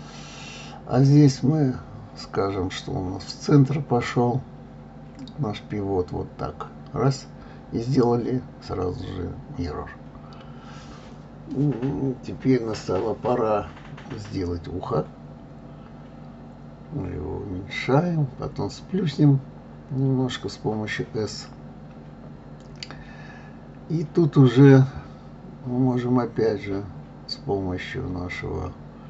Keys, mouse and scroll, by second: 2.0-3.0 drag, 5.0-6.0 drag, 6.1-7.1 middle drag, 7.5 click, 7.8 click, 8.1 click, 8.6 shift+a, 12.3 ctrl+2, 13.4 d, 13.9 f, 14.0 g, 16.9-17.9 middle drag, 20.4-21.4 middle drag, 21.8 click, 22.6-24.0 drag, 24.1 middle click, 24.7 click, 25.8 g, 28.4 middle click.